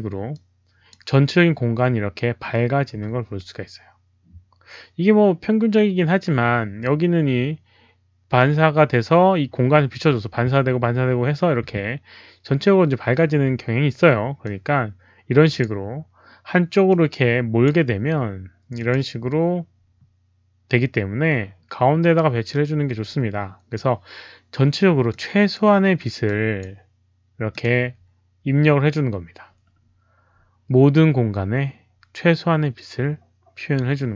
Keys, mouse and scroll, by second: 0.3 click, 14.4-15.5 drag, 16.8 click, 18.7 click, 19.9 click, 22.4-23.7 drag, 25.0 click, 26.2 click, 27.4 click.